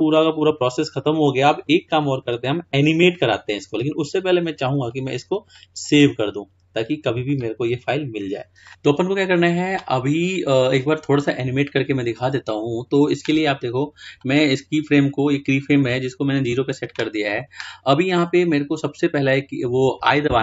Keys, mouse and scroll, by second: 0.3-1.9 shift+middle drag, 1.9-2.5 scroll down 2, 2.5-5.0 scroll up 2, 5.0 click, 6.0-8.4 drag, 14.8-18.6 drag.